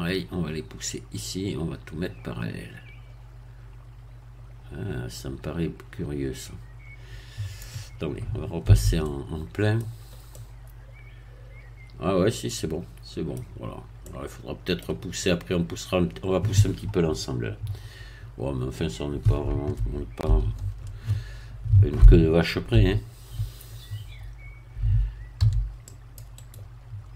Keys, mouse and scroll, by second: 8.7 z, 9.0 middle click, 9.9 scroll down 1, 10.3-13.4 middle drag, 13.4-14.0 scroll down 2, 14.0-15.6 middle drag, 18.0 KP_1, 20.4 ctrl+3, 22.8 z, 25.4 c, 25.9 click, 26.4 right click.